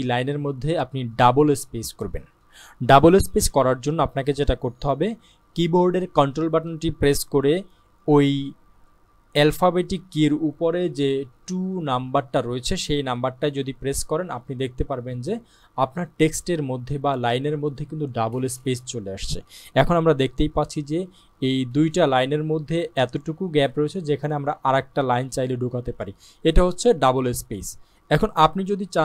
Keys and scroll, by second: 13.5 ctrl+2.